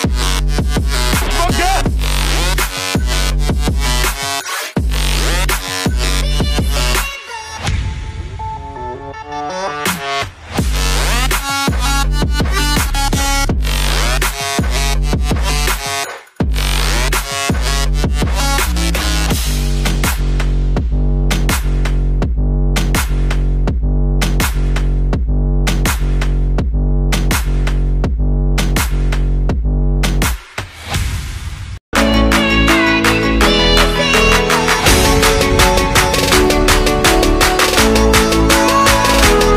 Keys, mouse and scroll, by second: 16.6 typing, 19.5 double click, 20.1 scroll down 1, 24.9 typing, 26.5-30.5 typing, 26.8 Caps_Lock, 31.7-32.7 typing, 34.0-37.0 typing, 39.3-39.5 typing.